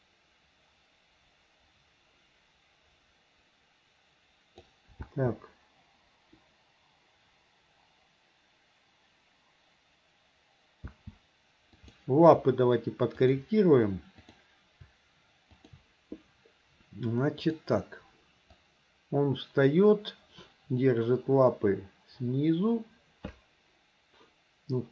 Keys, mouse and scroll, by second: 5.0 space, 10.9 space, 11.9 click, 13.2 shift+click, 14.2 click, 15.5 shift+click, 17.5 click, 18.6-24.9 drag.